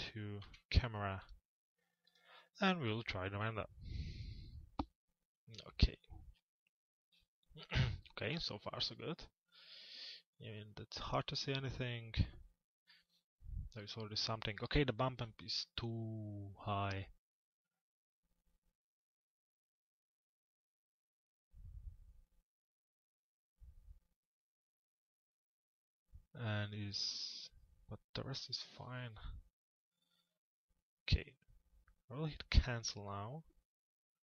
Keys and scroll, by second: 0.5 c.